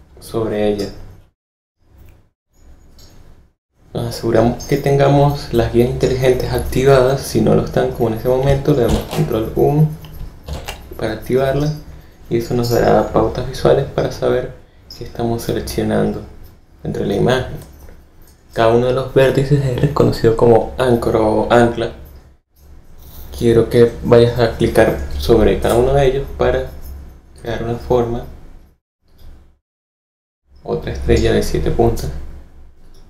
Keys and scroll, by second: 8.8 super+u, 10.4 super+u.